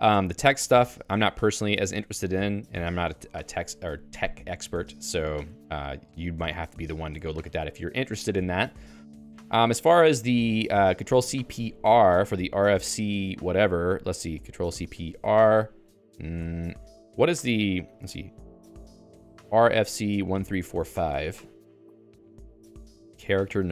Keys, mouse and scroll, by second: 0.0-3.6 typing, 1.7 Escape, 4.8-9.7 typing, 14.4 s, 16.4 BackSpace.